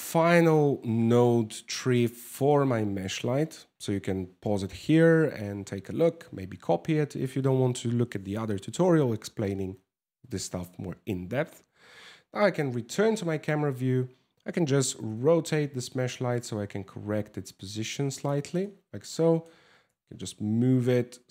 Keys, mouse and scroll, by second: 12.0 KP_0, 14.4 r, 18.2 middle click, 19.4 g.